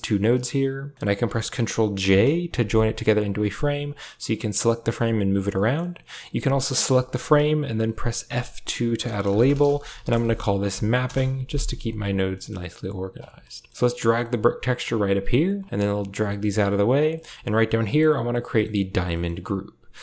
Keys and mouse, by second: 0.9 middle click, 1.9 ctrl+j, 3.7-5.3 drag, 5.4 middle click, 5.9 click, 7.7 F2, 9.5 p, 13.4 middle click, 14.7 click, 15.6 click, 16.0 g, 16.8 a, 16.9 click, 17.7 click, 18.4 click, 18.9 click.